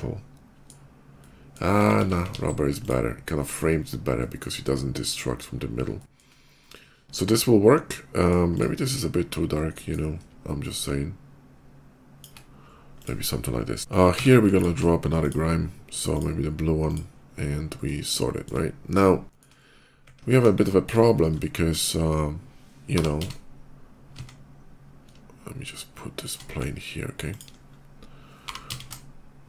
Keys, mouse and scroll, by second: 1.0 middle click, 1.6 ctrl+z, 2.0 ctrl+z, 2.2 ctrl+z, 2.6 click, 3.9 middle click, 4.8 middle click, 5.8 shift+middle click, 6.4-8.1 shift+middle drag, 8.3 click, 9.5 middle click, 10.4-12.0 drag, 12.8 click, 14.4 click, 14.4 q, 15.0 click, 16.0 click, 16.7 click, 17.9 shift+middle click, 18.9 shift+middle click, 20.3 KP_5, 20.8 middle click, 21.0 middle click, 21.2 middle click, 21.6 middle click, 22.7 g, 23.0 z, 23.1 g, 26.1 shift+click, 26.3 s, 27.1 click, 27.4 middle click, 27.5 middle click, 28.2 g, 28.5 z, 29.4 z.